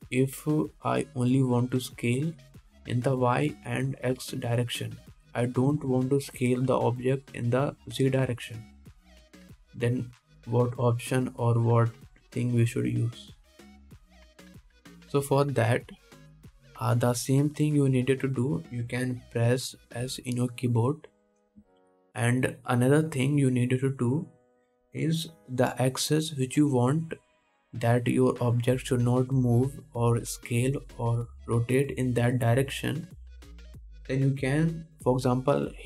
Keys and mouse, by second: 21.2 s.